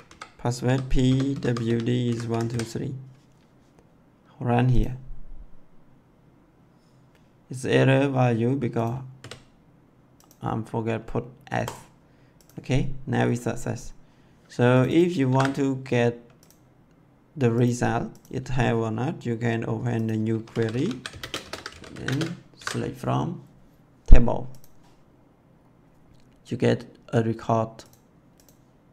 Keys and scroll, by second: 0.0 Left, 0.6-2.5 typing, 9.1 s, 15.2 ctrl+c, 20.1-22.3 typing, 22.4 ctrl+v.